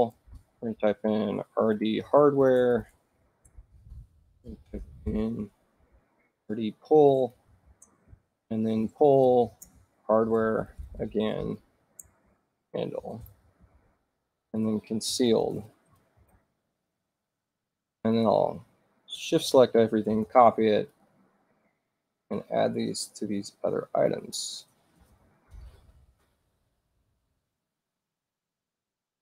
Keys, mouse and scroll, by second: 0.0-3.7 typing, 3.7 shift+Return, 4.7 shift+r, 6.3-16.8 typing, 12.2 shift+Return, 14.6 shift+Return, 18.1 click, 20.1 ctrl+c, 20.9 click, 22.2 right click, 23.9 click, 25.2 v, 25.4 Return, 26.2 right click, 28.0 click, 28.7 v, 28.9 Return.